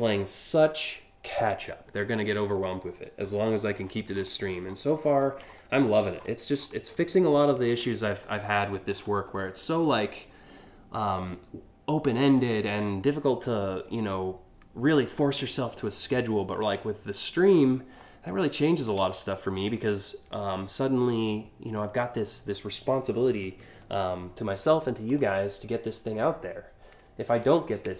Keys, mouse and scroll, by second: 2.5-3.6 scroll up 5, 3.8 scroll down 1, 4.3-4.8 ctrl+scroll up 2, 5.1 alt+scroll up 6, 5.8-6.4 scroll up 2, 7.3 ctrl+KP_2, 7.8 ctrl+KP_2, 8.0 ctrl+KP_1, 8.6 ctrl+KP_3, 8.9 scroll up 1, 12.8 scroll up 1, 13.5 scroll down 1, 14.5 scroll down 1, 16.3 scroll up 1, 18.8 scroll up 1, 24.7 click, 27.1 click, 27.6 ctrl+click.